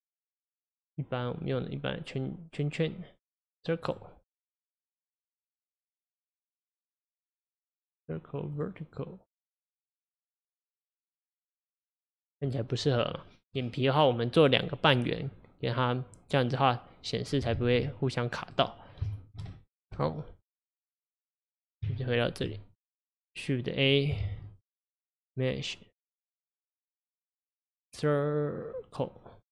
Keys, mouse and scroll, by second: 0.5 click, 1.5 click, 6.8 click, 7.6 click, 17.6 ctrl+z, 18.5 click, 19.1-20.0 shift+middle drag, 20.0 click, 21.9 Tab, 22.9 click, 24.2 shift+a.